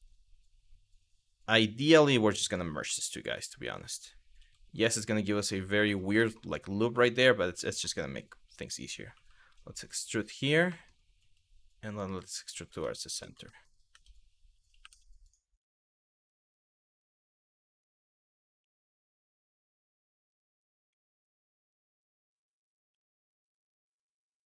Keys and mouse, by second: 2.0 shift+click, 2.5 m, 4.0 g, 5.4 click, 5.9 shift+middle click, 6.7 shift+middle click, 7.3 shift+middle click, 8.7 e, 9.7 click, 10.3 shift+middle click, 10.8 e, 11.9 click, 12.4 Tab, 13.2 shift+middle click, 13.5 Tab, 14.4 2, 14.9 click, 18.2 f, 20.5 e, 21.5 click, 22.5 1, 23.9 m.